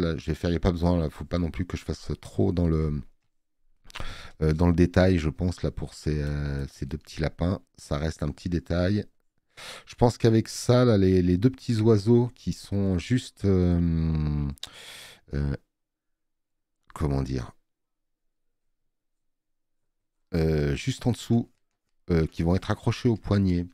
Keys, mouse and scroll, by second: 1.2 space, 1.3 click, 3.2 space, 3.3 click, 12.8 click, 12.8 space.